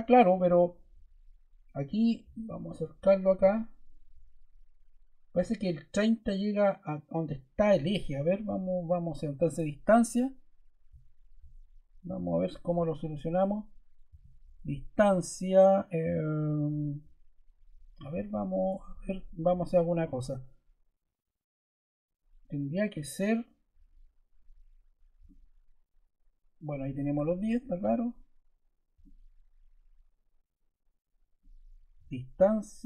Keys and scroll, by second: 9.4 d, 14.0 d, 27.1 Escape, 31.9 d.